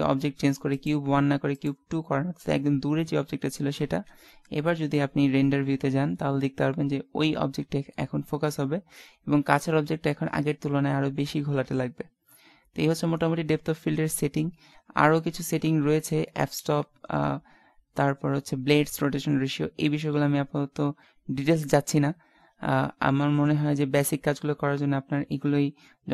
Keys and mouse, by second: 0.8-2.0 drag, 3.8 shift+z, 25.3 Escape.